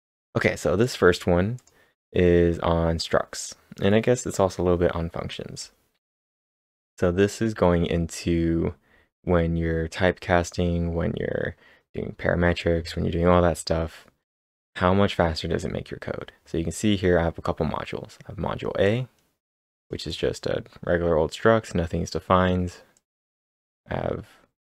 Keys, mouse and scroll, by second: 0.8 click, 1.6 click, 13.6-16.1 typing, 13.7 scroll down 1, 13.8 click, 13.8 scroll up 1, 14.1-15.2 scroll down 2, 14.2 click, 15.2-17.4 scroll up 5, 18.8-22.6 drag, 18.8-19.2 scroll up 1, 22.9 click, 22.9-23.3 scroll up 1, 23.4 scroll down 1, 23.8-24.3 scroll up 1.